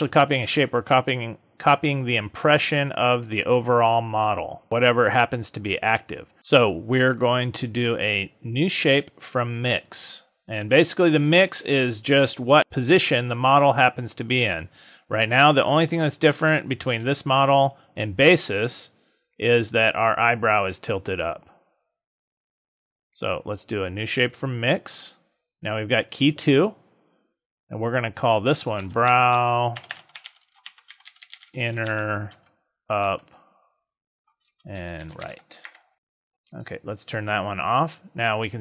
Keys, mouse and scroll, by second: 7.0 click, 17.0 z, 19.2 click, 23.0 click, 24.3 click, 27.6 click, 29.8 BackSpace, 31.1 n, 36.5 click, 38.4 click.